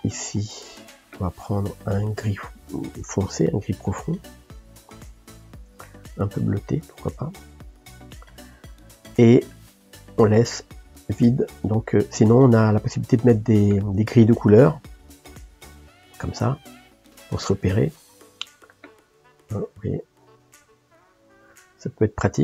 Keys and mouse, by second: 0.2-6.5 drag, 16.5-19.7 middle drag, 19.7 click, 21.8-22.4 middle drag.